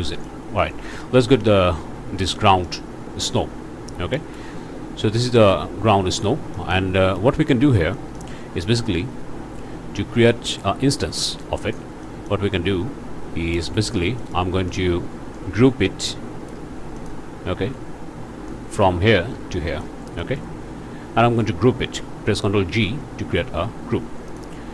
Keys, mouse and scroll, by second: 0.1 middle click, 1.4 click, 2.3 middle click, 3.0-3.3 scroll down 1, 4.1 ctrl+space, 4.5-4.8 ctrl+scroll up 2, 4.8 scroll down 2, 5.2 middle click, 6.5 middle click, 7.2 ctrl+space, 7.9 middle click, 8.3-8.6 scroll up 2, 11.1 click, 12.0 click, 12.8 scroll down 2, 13.5 ctrl+space, 13.8-14.1 ctrl+scroll down 2, 14.2 ctrl+click, 14.7 click, 15.3-16.7 drag, 17.0 click, 18.5-20.0 drag, 20.2 click, 20.5 scroll up 2, 21.2 click, 22.7 ctrl+g, 24.3 click.